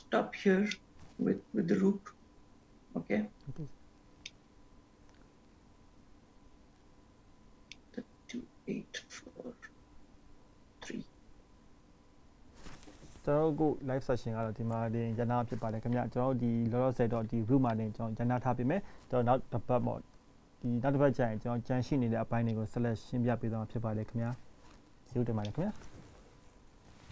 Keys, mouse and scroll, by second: 0.2 click, 0.8 scroll down 1, 0.9 middle click, 2.8 scroll up 1, 3.5 scroll down 1, 4.6 middle click, 7.0-7.8 scroll up 1, 7.8 scroll up 1, 8.3 middle click, 13.9-15.6 scroll down 7, 15.6-16.2 scroll down 1, 17.1-17.4 scroll down 1, 17.4-17.9 scroll down 1, 19.2-19.6 scroll down 1, 21.2 scroll down 1, 22.9 shift+middle click, 24.5 scroll up 1, 24.9 shift+middle click, 25.8 scroll up 1, 26.2 shift+middle click.